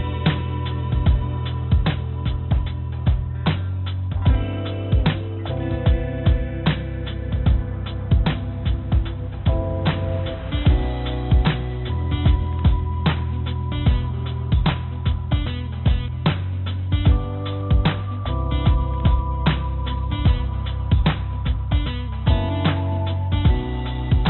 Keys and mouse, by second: 2.2-5.2 drag, 2.2 right click, 5.2 g, 8.0-10.2 drag, 10.2 g, 13.6 g, 17.9 click, 18.0-22.8 drag, 23.4 click, 24.1-24.2 middle drag.